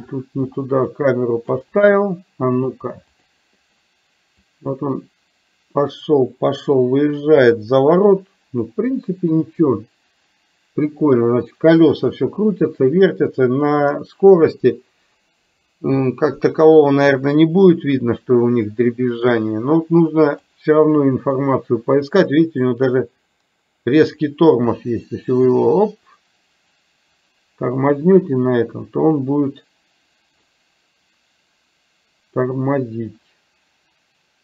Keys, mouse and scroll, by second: 0.5-1.5 shift+middle drag, 3.3 click, 4.5-20.5 drag, 22.8-34.4 drag.